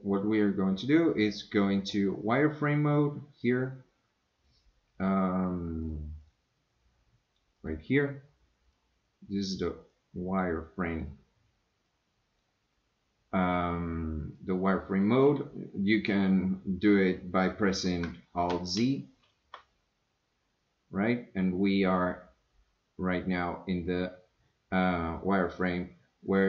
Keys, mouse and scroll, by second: 5.8 click, 6.2 click, 8.7 click, 9.9-11.1 drag, 11.9 click, 18.8 shift+z.